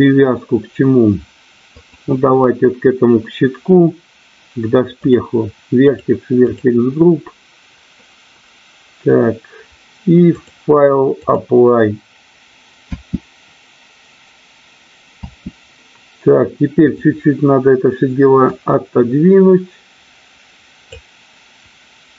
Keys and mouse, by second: 5.0 click, 5.8 click, 6.5 click, 10.3 click, 12.9 space, 15.6 space, 16.7 click, 18.5-21.0 drag.